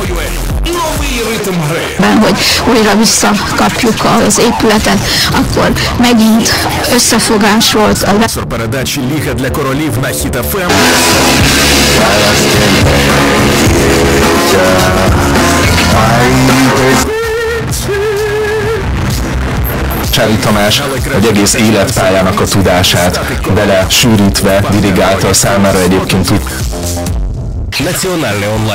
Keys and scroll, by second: 8.4 Page_Down, 17.7 Page_Down, 27.2 Page_Down.